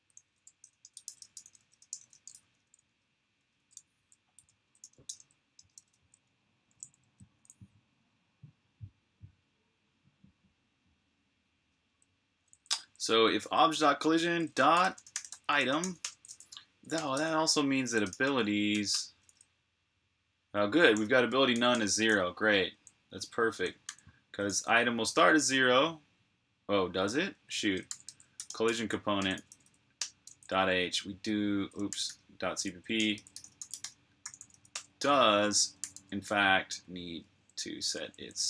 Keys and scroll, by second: 0.0-1.9 typing, 9.2 typing, 11.7-18.4 typing, 20.5-21.8 typing, 23.4-24.2 typing, 27.5-29.8 typing, 31.5-38.3 typing.